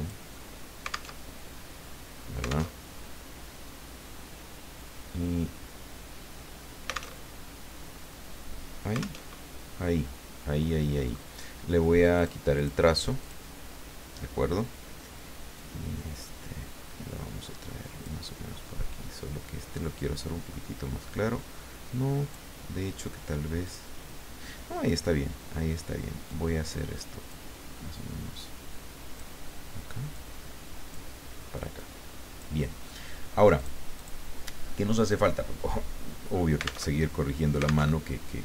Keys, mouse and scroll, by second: 1.2 alt+Tab, 2.7 alt+Tab, 7.2 alt+Tab, 9.2 alt+Tab, 10.7 middle click, 12.1 click, 12.5 click, 13.2 click, 15.5-18.2 drag, 20.1-22.5 drag, 23.6 click, 26.2-27.9 drag, 28.4-29.6 drag, 30.1-31.2 drag, 31.8 click, 33.5 click, 33.9 click, 36.9 alt+Tab, 37.9 alt+Tab.